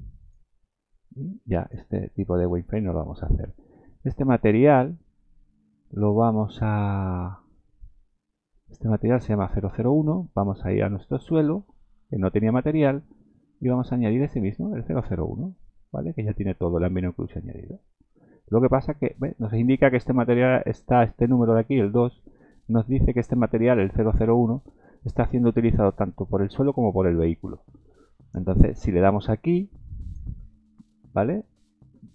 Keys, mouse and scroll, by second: 1.1 click, 2.0-2.3 scroll down 5, 2.5 shift+middle click, 3.2 scroll down 2, 8.6 click, 11.7 click, 14.0 click, 30.0 click.